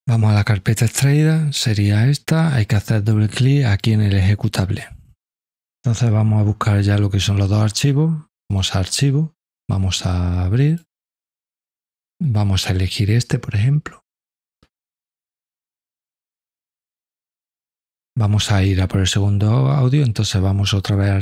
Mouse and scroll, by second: 0.6 click, 0.9 click, 3.7 click, 8.4 click, 10.7 click, 14.7 click, 15.0 click, 20.9 click.